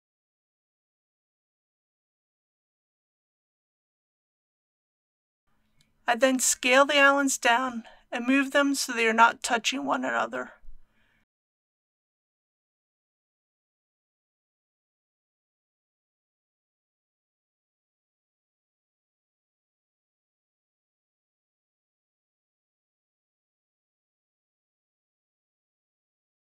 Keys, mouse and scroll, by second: 10.1 s, 12.5 click, 19.4 typing, 21.9 click, 22.3-25.1 typing, 22.5 click, 22.8 click, 23.0 click, 23.3 click, 23.7 click, 24.3 click, 24.5 click, 25.0 click, 25.2 click, 26.3 click.